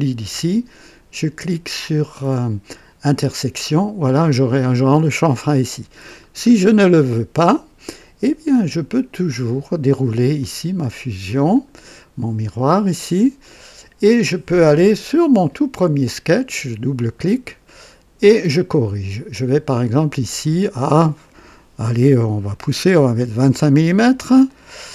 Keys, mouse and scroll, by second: 3.0 click, 4.3-6.2 drag, 6.4 scroll up 1, 6.9-7.2 scroll down 1, 9.2 click, 10.4 click, 11.5 click, 13.3 click, 14.9 click, 16.3 click, 17.6 right click, 18.5 scroll up 1, 20.2 click, 23.2 KP_2, 23.3 KP_5, 24.4 click, 24.4 typing.